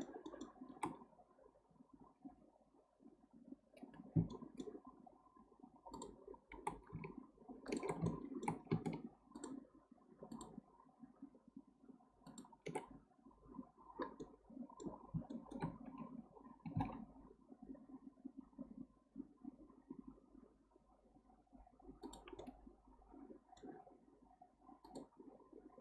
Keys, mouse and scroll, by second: 0.9-1.5 scroll up 1, 3.7-4.1 scroll down 1, 4.3-5.9 shift+middle drag, 5.9 shift+click, 7.7 ctrl+click, 8.1-9.4 shift+middle drag, 9.4 ctrl+drag, 10.3 ctrl+click, 12.3 ctrl+click, 14.2-15.1 middle drag, 15.1 scroll up 1, 15.3-15.7 shift+middle drag, 15.7-16.6 scroll up 1, 16.6 g, 22.4-24.8 middle drag, 24.8 click.